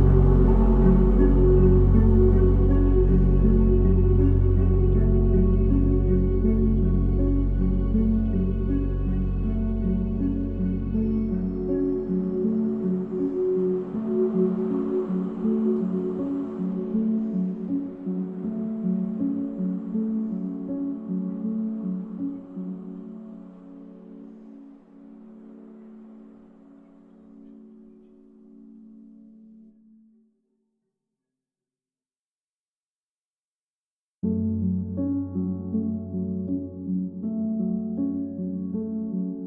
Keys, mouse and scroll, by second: 0.3-1.5 drag, 1.5-2.8 middle drag, 2.8 shift+a, 5.6-7.3 drag, 7.3 ctrl+s, 7.7 click, 8.7 click, 11.4 click, 12.1-12.7 drag, 14.8-15.6 drag, 17.7-18.6 drag, 20.6-22.2 drag, 25.6-26.0 scroll up 2, 26.8-28.0 scroll down 2, 28.0 click, 28.6 click, 29.5-32.4 drag, 33.6 click, 35.4 ctrl+s, 36.9 click.